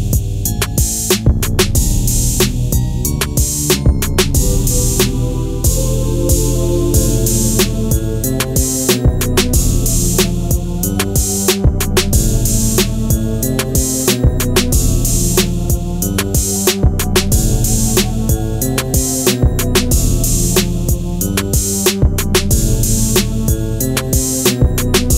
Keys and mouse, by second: 0.9-1.5 drag, 2.4 middle drag, 3.0 click, 6.1-6.4 middle drag, 7.3 Tab, 8.3 Tab, 9.5 middle drag, 11.0 Delete, 12.0 KP_1, 13.6 shift+a, 16.0-18.9 typing, 17.6 click, 19.4 click, 19.9 s, 21.3 click, 21.7 s, 22.0 x, 24.3 click.